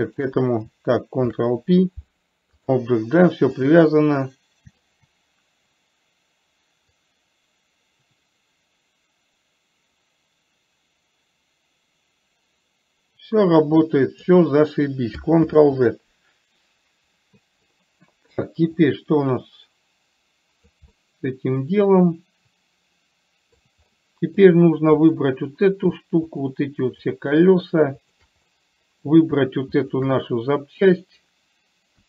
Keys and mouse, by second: 0.4 shift+click, 1.5 ctrl+p, 3.9 click, 5.1 shift+click, 7.4-14.6 drag, 15.9 ctrl+z, 19.2-21.1 drag, 21.2-24.0 middle drag, 24.2 middle click, 25.5 click, 26.7 shift+drag, 27.4 shift+drag, 28.2 shift+click, 28.9-29.4 middle drag, 30.1 shift+click.